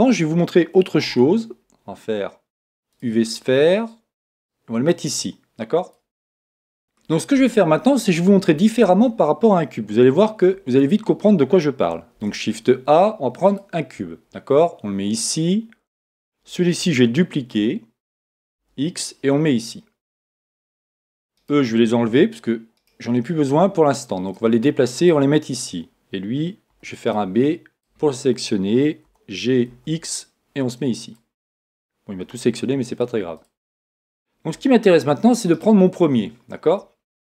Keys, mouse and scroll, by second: 1.0 shift+a, 4.4-6.4 drag, 6.8-8.4 middle drag, 10.4 x, 12.1 shift+a, 15.1-17.1 drag, 17.3 shift+d, 21.3-24.4 right drag, 23.2-24.4 middle drag, 24.4-26.1 drag, 24.7 middle click, 26.7 b, 29.0 g, 31.1-32.8 drag, 31.6 middle click, 32.6-34.3 middle drag, 33.3-35.3 drag, 34.5 a, 35.5-37.2 right drag, 36.1-37.2 middle drag.